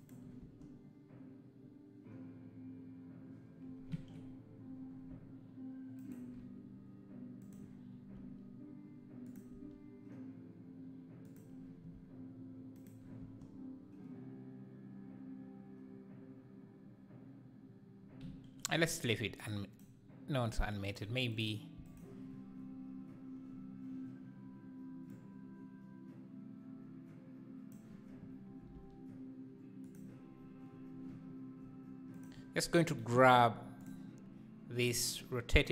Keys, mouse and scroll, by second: 0.0 shift+Right, 0.0-0.5 right drag, 0.5 space, 4.0 Escape, 6.0 shift+Right, 6.0-8.1 right drag, 8.1 g, 9.5 r, 12.8 shift+Right, 12.8 right click, 13.2 space, 18.3 Escape, 18.7-19.5 scroll up 1, 19.5-20.5 drag, 20.8 click, 21.3 click, 22.0 x, 25.2-28.1 drag, 28.6 r, 33.9 click, 34.8 r.